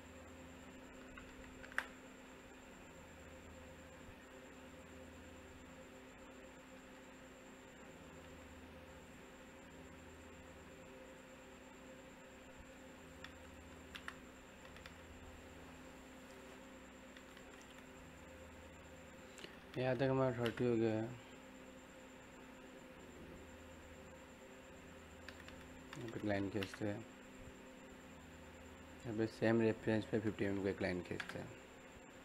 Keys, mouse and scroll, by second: 2.8 middle click, 2.8 typing, 3.1 scroll up 1, 3.8 middle click, 4.0-4.4 typing, 4.6 click, 9.0 click, 9.0 typing, 13.6 e, 13.8 space, 14.1 scroll down 1, 14.3 middle click, 16.3 click, 20.2 l, 20.4 space, 21.8 click, 25.0 click, 25.6 middle click, 26.3 l, 26.5 space, 27.3 click.